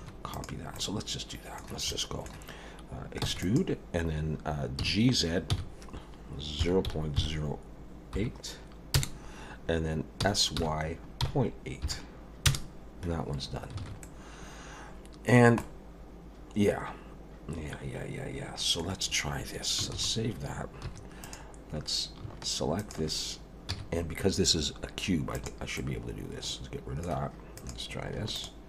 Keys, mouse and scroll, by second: 0.0 2, 0.3 click, 0.7 middle click, 1.9 middle click, 3.2 e, 4.8 g, 10.2 s, 13.8 alt+a, 14.0 middle click, 15.6 middle click, 19.9 ctrl+s, 20.9 3, 21.2 click, 21.9-22.2 scroll up 1, 22.8 shift+click, 23.7 x, 25.8 middle click, 27.6 click, 28.3 shift+click.